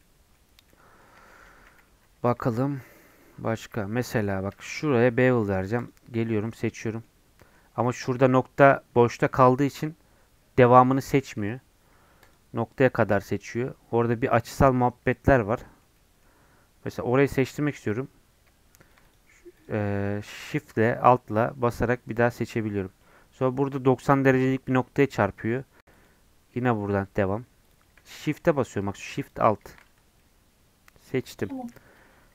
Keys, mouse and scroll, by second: 0.0-1.9 middle drag, 1.9 n, 2.5 middle click, 3.1 Tab, 3.3 middle click, 3.5-3.8 scroll up 3, 3.6 2, 4.2 middle click, 4.8-5.8 scroll up 1, 5.8 alt+click, 6.4-8.0 middle drag, 8.0 1, 12.2 alt+click, 13.0-13.4 scroll up 1, 13.4-15.5 scroll down 1, 15.5-16.8 middle drag, 16.8 scroll up 1, 17.7-22.1 alt+drag, 22.5-25.9 middle drag, 25.9-28.1 alt+shift+drag, 28.1-29.2 middle drag, 29.2 alt+shift+click, 30.0 scroll down 1, 30.1-31.2 middle drag, 31.2 scroll up 1, 31.5 shift+middle click, 31.8 Tab.